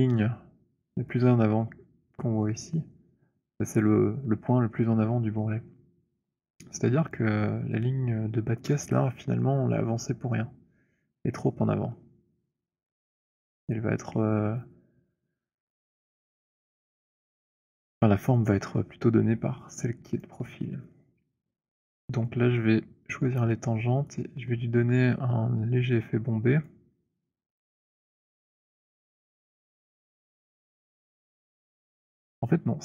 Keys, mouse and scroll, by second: 7.1 click, 20.2 click, 24.0 right click, 26.7 click, 27.4-28.5 scroll, 29.3-30.2 scroll.